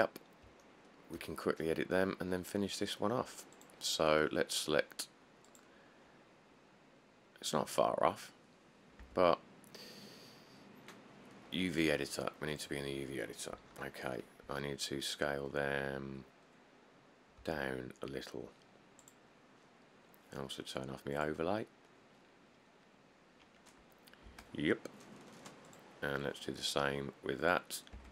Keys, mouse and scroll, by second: 0.2-0.7 scroll up 4, 1.8 scroll up 1, 1.9 middle click, 9.2 Tab, 10.4-11.2 scroll, 13.7 middle click, 13.8 middle click, 14.1 middle click, 14.2 middle click, 17.6 s, 18.5 scroll, 24.5 Tab.